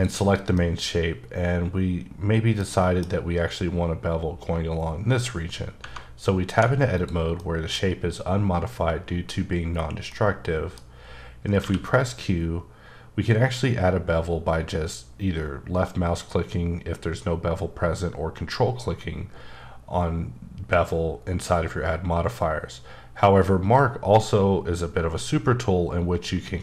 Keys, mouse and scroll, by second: 0.5 middle click, 6.5 2, 7.0 click, 7.4 middle click, 10.5 middle click, 11.6 q.